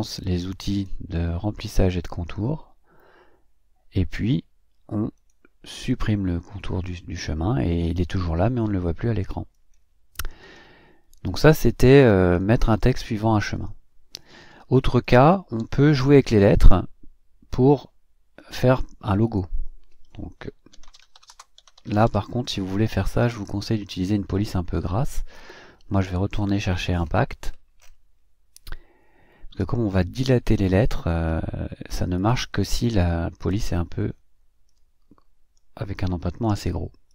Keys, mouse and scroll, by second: 5.3 click, 5.9 click, 9.5 click, 10.4 click, 12.3 click, 12.8 click, 14.5 Delete, 15.0 click, 15.6 Delete, 20.5-22.6 typing, 23.2 click, 26.3-26.9 scroll up 4, 27.4-28.0 scroll up 4, 31.3 scroll up 2, 32.2 click, 33.4 click, 34.7 click.